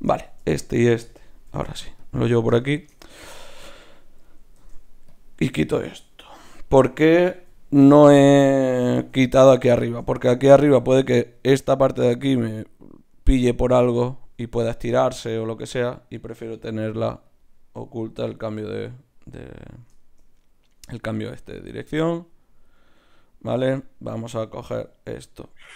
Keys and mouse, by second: 1.5 click, 1.5 g, 2.3-4.5 drag, 3.0 g, 4.5 ctrl+Tab, 5.5-7.0 drag, 7.4 ctrl+x, 8.1-9.8 drag, 8.9 ctrl+x, 9.8 ctrl+Tab, 15.0 ctrl+Tab, 15.5 click, 16.7 g, 17.8-19.6 drag, 18.0 g, 23.8-25.7 right drag, 24.9 shift+q.